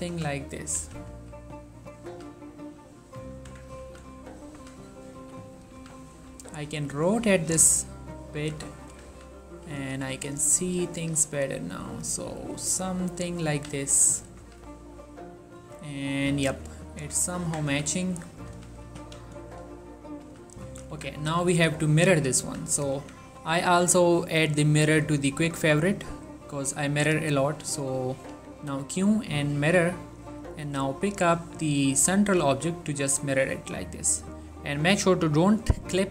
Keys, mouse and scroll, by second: 0.0-2.2 typing, 0.7 right click, 2.0 click, 3.6 Tab, 4.0-6.4 typing, 5.7 right click, 7.3 click, 7.5 g, 7.8 x, 8.3 click, 8.5 z, 9.0 Tab, 9.2 z, 9.7 scroll up 2, 9.9 ctrl+middle click, 10.4 click, 10.8 g, 12.0 click, 12.8 g, 13.4 click, 13.7 z, 14.0 Tab, 14.5 z, 15.7 s, 16.2 right click, 16.8 shift+middle click, 17.5 Tab, 17.8-19.2 typing, 18.2 click, 20.2 click, 20.4-20.8 typing, 21.0 Tab, 21.4 scroll down 2, 21.5 middle click, 21.6-22.4 scroll up 2, 22.5 ctrl+a, 22.8 drag, 23.0 1, 24.1-25.2 drag, 25.2 right click, 26.0 click, 27.0 q, 28.4 typing, 29.7 click, 32.3 shift+middle click, 33.2 ctrl+scroll up 1, 33.4 click, 34.2 scroll up 1, 34.5 click.